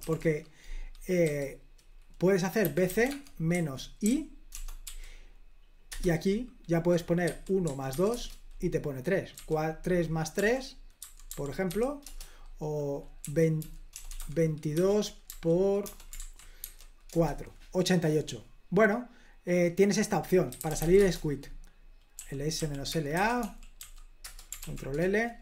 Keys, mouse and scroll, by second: 0.1-1.3 typing, 2.5-4.9 typing, 6.0 Return, 7.3-8.0 typing, 8.2 Return, 9.5 typing, 11.4-11.8 typing, 12.1 Return, 13.3-16.7 typing, 17.2 Return, 20.4-24.4 typing, 24.7 ctrl+l.